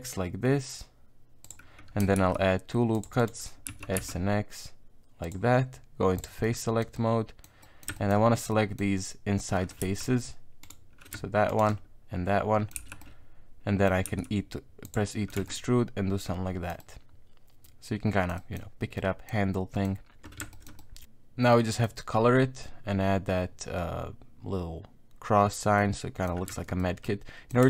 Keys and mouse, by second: 2.2 ctrl+r, 3.7 s, 6.2 click, 6.4 middle click, 7.0 middle click, 7.4 middle click, 7.6 middle click, 8.0 shift+middle click, 8.5 middle click, 9.6 middle click, 9.8 z, 10.6 right click, 11.5 shift+right click, 11.7-12.7 middle drag, 12.8 z, 13.0 middle click, 14.1 e, 15.1 middle click, 15.4 Tab, 15.5-16.7 middle drag, 16.8-18.3 middle drag, 18.4 middle click, 19.0 middle click, 19.5 middle click, 20.5 shift+middle click, 20.8 middle click, 21.5 middle click, 25.8 middle click, 26.5 Tab, 26.8 middle click.